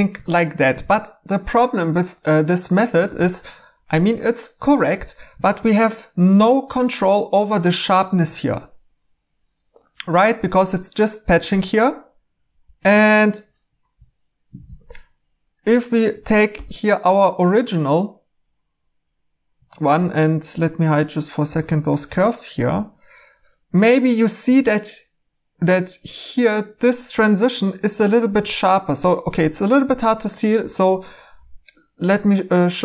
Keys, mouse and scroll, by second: 0.7 e, 1.8 typing, 3.0 e, 5.4 e, 12.4 3, 13.6 Escape, 14.6 e, 16.5 alt+h, 19.6 Tab, 21.4 h.